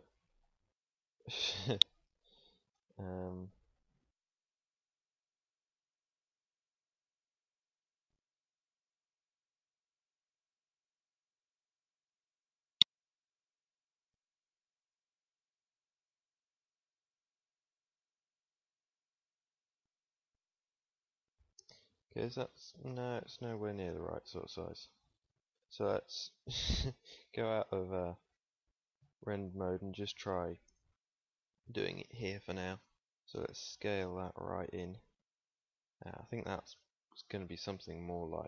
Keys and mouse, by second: 3.9 Tab, 4.0 Tab, 7.4 s, 10.4 s, 14.4 s, 18.9 Tab, 25.9 z, 27.4-28.7 drag, 33.1 KP_1, 33.1 s, 36.5 ctrl+s.